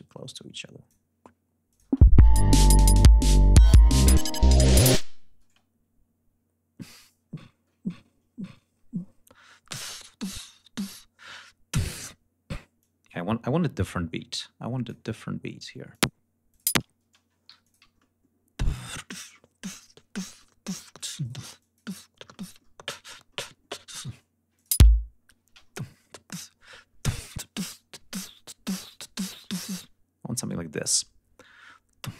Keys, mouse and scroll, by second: 1.6 click, 1.8 space, 3.0 scroll up 3, 3.7 ctrl+scroll up 2, 4.6 scroll down 2, 5.3 space, 5.6 scroll down 2, 7.2 ctrl+scroll up 2, 9.0 ctrl+scroll up 2, 9.2 ctrl+scroll down 2, 9.5 ctrl+scroll up 2, 10.3 ctrl+d, 12.7-15.0 drag, 15.0 scroll down 2, 15.8 click, 16.4 click, 16.6 space, 17.4 g, 17.5-18.3 scroll up 2, 18.5-19.0 ctrl+scroll up 1, 19.2-19.8 ctrl+scroll up 1, 20.0 ctrl+y, 20.3 ctrl+middle click, 20.9-21.4 ctrl+shift+drag, 21.1 ctrl+shift+right click, 21.5 ctrl+shift+click, 22.2 middle click, 22.9 middle click, 23.7 click, 24.4 click, 24.6 space, 24.9 ctrl+scroll down 2, 25.0-25.7 ctrl+scroll up 4, 25.4 ctrl+space, 26.3 d, 26.8 scroll down 2, 28.2-28.9 scroll up 4, 29.4-30.0 scroll down 4, 31.0 scroll down 2.